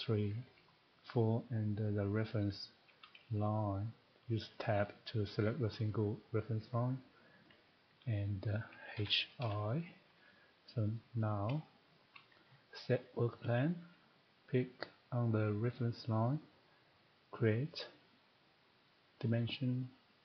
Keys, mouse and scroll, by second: 1.2 ctrl+click, 3.2 scroll, 4.6 Tab, 7.6 ctrl+click, 8.9-9.4 typing, 11.0 click, 11.4 middle click, 11.6 shift+middle click, 11.9-12.2 scroll, 13.1 click, 15.6 click, 17.5 click, 18.9 click.